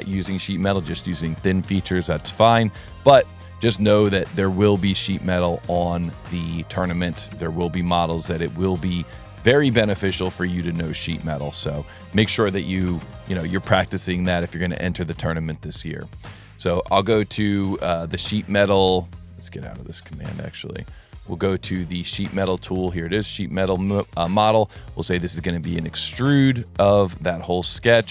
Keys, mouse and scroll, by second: 2.3 click, 6.1 click, 9.0 click, 11.9 click, 12.0 click, 13.9 scroll up 1, 14.2 scroll down 1, 14.6 ctrl+middle click, 16.4 click, 16.8-18.3 typing, 19.6 click, 20.3 click, 21.5 click, 23.6 click, 25.0 click, 26.0 scroll down 2, 27.7 middle click.